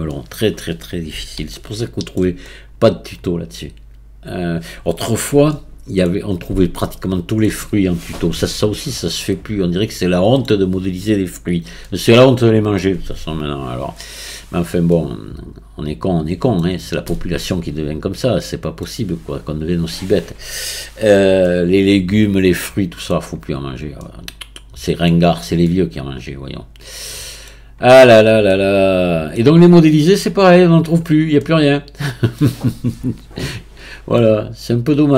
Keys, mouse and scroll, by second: 23.6-24.0 scroll up 1, 24.0-25.3 middle drag, 25.3-25.7 scroll down 1, 25.7-28.0 middle drag, 28.0-28.5 scroll up 1, 28.5-33.7 middle drag, 33.7-34.2 scroll down 2, 34.2-35.1 middle drag.